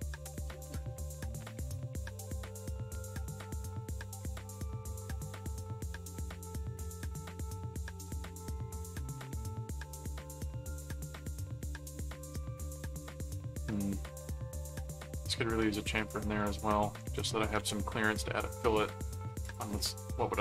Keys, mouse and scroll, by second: 0.4-1.5 middle drag, 8.1 ctrl+click, 8.4 ctrl+Tab, 9.3-12.2 middle drag, 13.1 click, 14.5 click, 16.1-17.7 typing, 16.1 click, 19.4 click.